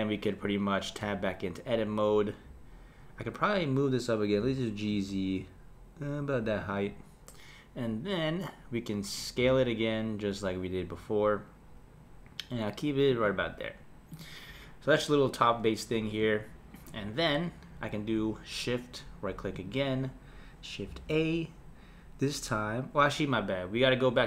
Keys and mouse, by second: 1.0 Tab, 4.4 g, 9.4 s, 14.1 click, 19.5 shift+right click, 20.9 shift+a.